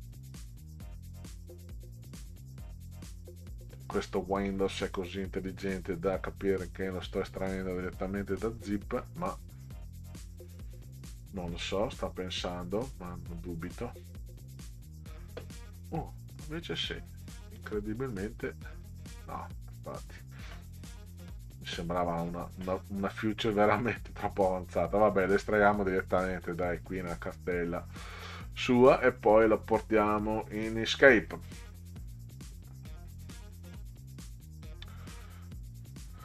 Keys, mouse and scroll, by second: 13.7 click, 16.0 click, 17.6 click, 19.9 click, 21.5 click, 22.9 click, 25.1 click, 28.9-30.7 drag.